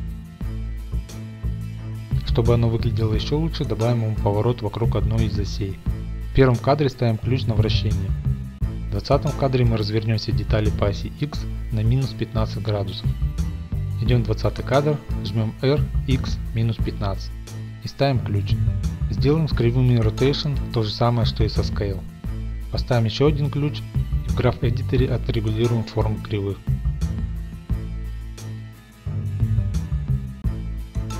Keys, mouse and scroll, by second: 3.4-7.3 drag, 7.2 i, 8.2-9.5 drag, 8.8-10.4 typing, 13.0-14.6 right drag, 14.6-15.9 drag, 15.7-16.6 typing, 17.3 Return, 18.3 i, 18.7 click, 22.5-23.7 drag, 23.3 i, 24.3 Home, 24.5-25.5 scroll, 25.3 click, 26.0 scroll, 26.4 click, 26.7 g, 26.9 y, 27.6 click, 27.8 scroll, 28.1 click, 28.8 ctrl+middle click, 29.0 g, 29.2 y, 30.2 click, 30.7 click, 31.0 shift+middle click, 31.1 middle click.